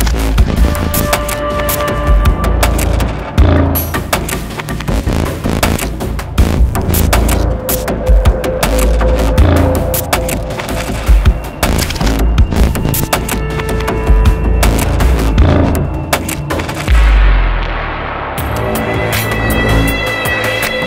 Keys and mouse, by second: 1.7-2.7 drag, 3.8-7.1 drag, 8.6-9.6 drag, 9.7-10.7 drag, 10.8-11.9 drag, 12.3-13.3 drag, 13.6-14.6 drag, 15.8-19.6 drag, 20.6-20.8 drag.